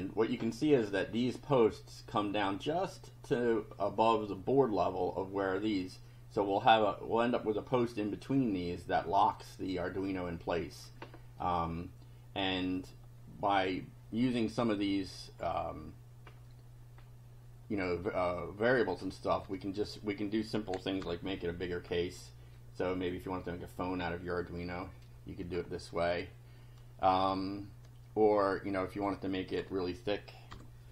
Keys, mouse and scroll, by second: 0.7 click, 9.8 click, 11.4-13.1 drag, 15.4 scroll up 1, 16.3 scroll up 1, 16.9 scroll up 1, 17.9 click, 18.9 click, 19.5 1, 21.0 F5, 21.9 scroll down 2, 22.6 click, 28.9 click, 29.6 1, 30.5 F5.